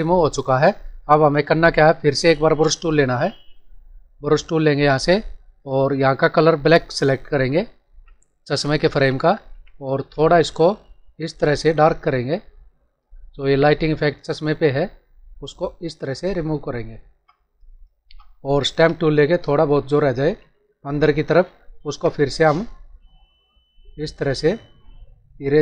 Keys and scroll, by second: 0.6 ctrl+=, 1.6 space.